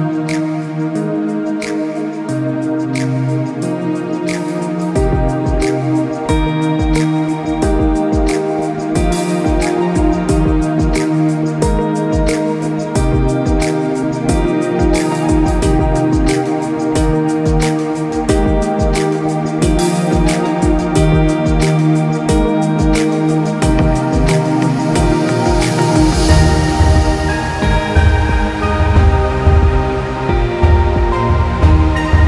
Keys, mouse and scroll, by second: 0.3 typing, 0.8 click, 3.0 shift+click, 3.8 click, 5.2 alt+shift+click, 6.2 click, 8.6 right click, 12.8 click, 13.9-14.5 scroll up 1, 14.5 scroll down 1, 14.8-15.4 scroll up 1, 15.4 scroll down 1, 16.1-16.7 scroll up 1, 16.7-18.0 scroll down 1, 18.0-18.9 scroll up 1, 19.4 click, 20.4 KP_5, 20.6 KP_Enter, 21.4 click, 22.9 click, 24.0 KP_7, 24.2 KP_Enter, 24.6 click, 26.7 KP_7, 26.9 Return, 27.5 click, 30.2 click, 31.4 click.